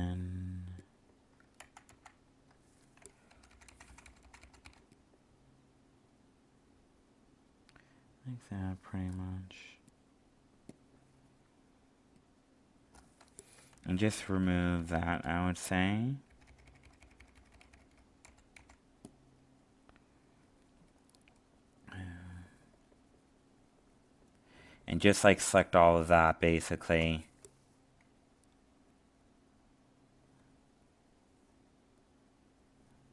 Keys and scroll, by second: 1.5 ctrl+z.